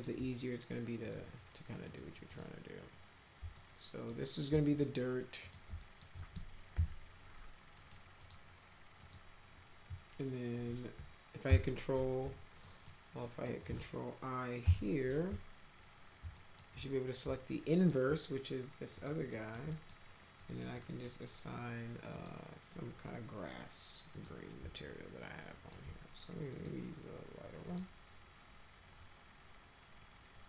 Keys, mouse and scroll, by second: 1.0 click, 1.9 click, 2.3 click, 3.6 alt+middle click, 4.7 ctrl+click, 5.4 ctrl+click, 5.8 alt+middle click, 6.2 middle click, 6.8 m, 7.8 middle click, 8.2 click, 9.0 click, 11.5 ctrl+i, 12.6 alt+middle click, 13.2 alt+middle click, 14.6 ctrl+i, 16.4 alt+middle click, 17.7 alt+middle click, 19.0 click, 19.3 middle click, 19.7 middle click, 20.4 middle click, 20.8 middle click, 22.1 click, 24.1 click, 24.9 alt+middle click, 26.5 click, 27.7 click.